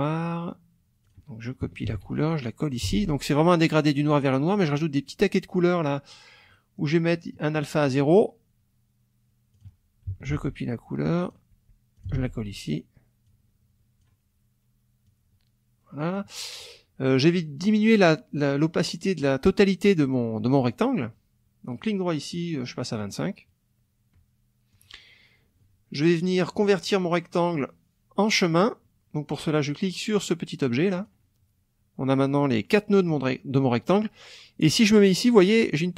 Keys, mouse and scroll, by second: 1.0 click, 1.8 ctrl+c, 2.7 ctrl+click, 2.9 ctrl+v, 4.6 click, 6.5 click, 7.8 click, 9.5 click, 10.2 ctrl+c, 11.1 click, 12.0 ctrl+click, 12.1 ctrl+v, 13.3 click, 15.0-16.3 drag, 17.3 click, 21.8 right click, 22.9 click, 24.7 click, 28.4 click, 31.0 click, 32.6 click.